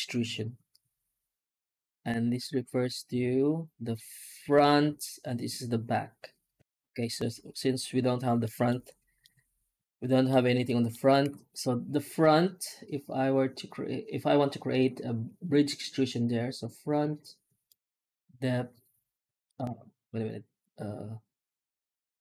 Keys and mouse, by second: 8.3 middle drag, 9.1-10.1 middle drag, 10.5 middle drag, 11.1 F9.